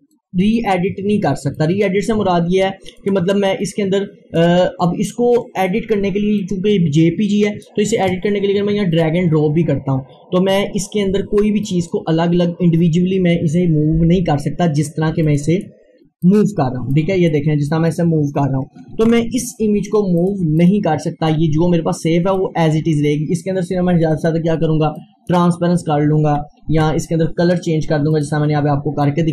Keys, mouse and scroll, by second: 5.5-6.2 scroll down 1, 6.4-9.0 drag, 9.4 scroll down 1, 11.7 click, 15.3 click, 16.9-19.0 drag, 19.0 ctrl+z, 20.2 click, 21.6 scroll up 1, 22.4-24.1 drag, 26.7 ctrl+z, 28.1 click.